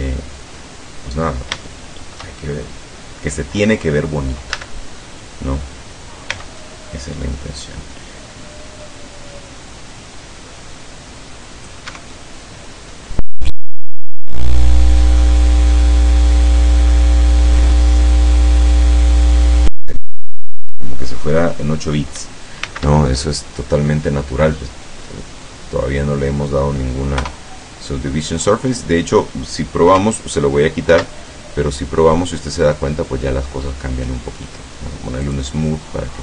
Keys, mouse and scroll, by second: 0.7-1.2 scroll up 4, 1.7 shift+middle click, 4.6 a, 6.4 c, 6.7-11.9 drag, 12.0 Escape, 12.2-13.2 middle drag, 13.8 click, 15.0-16.8 drag, 16.9 middle click, 18.1 Tab, 18.8-19.4 middle drag, 19.4-19.8 scroll up 2, 22.7 shift+c, 23.2-23.9 shift+scroll up 3, 24.0-24.8 middle drag, 25.1 scroll down 2, 25.5 scroll up 2, 25.9 scroll down 2, 27.2 KP_0, 31.0 ctrl+2, 35.3 click.